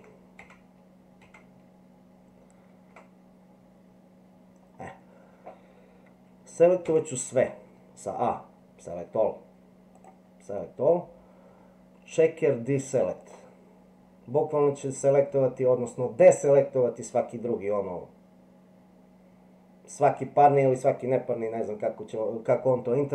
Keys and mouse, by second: 0.4 ctrl+z, 6.8 a, 10.0-13.3 drag.